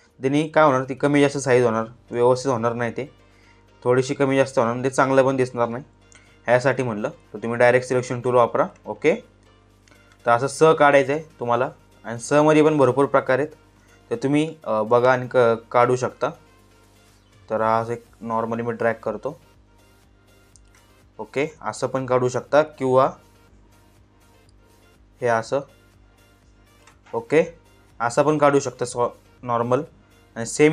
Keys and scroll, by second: 6.2 ctrl+z, 21.5 ctrl+z.